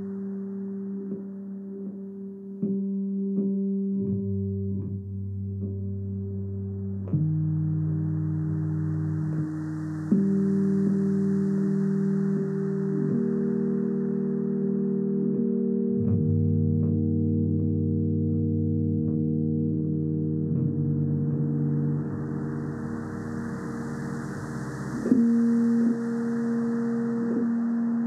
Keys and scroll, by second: 0.8 space, 4.2 space, 9.2 space, 13.6 space, 14.9 alt+super+z, 15.8 [, 17.0 space, 21.2 0, 22.6 space, 23.7 space, 25.7 0, 26.6 alt+super+z, 27.1 alt+super+5.